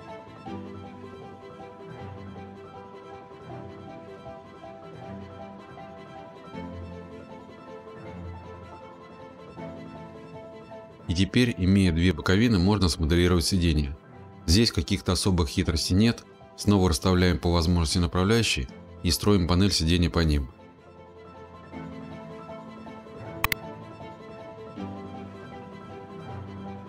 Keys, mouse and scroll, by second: 1.7 click, 4.6 Left, 7.7 click, 9.4 click, 15.4 click, 15.7 click, 16.6 click, 16.8 click, 17.1-17.9 typing, 17.7 click, 18.4 Escape, 18.6 click, 18.8 click, 18.8 right click, 19.0 click, 21.4 click, 22.0 click, 22.2 click, 22.2 click, 22.2 right click, 22.4 click, 22.6 click, 22.8 click, 22.8 click, 23.0 click, 23.2 click, 23.2-24.1 typing, 23.2 click, 23.8 click, 24.1 click, 24.3 click, 24.6 click, 24.9 click, 25.2 click, 25.6 click, 26.1 click, 26.8 middle click.